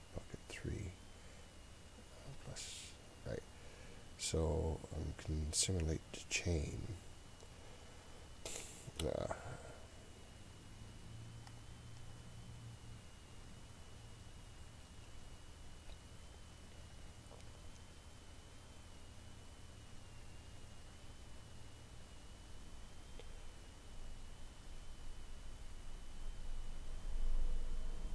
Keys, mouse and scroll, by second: 2.4 click, 6.4-10.1 drag, 10.3 click, 11.5-28.1 drag.